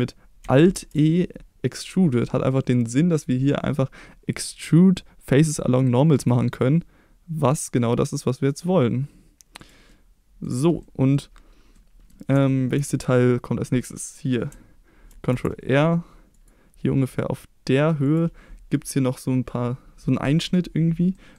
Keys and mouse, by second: 0.7 alt+e, 9.6 click, 9.8 middle click, 10.8 middle click, 11.7 middle click, 12.4 shift+middle click, 15.1 ctrl+r, 18.0 click, 21.1 middle click.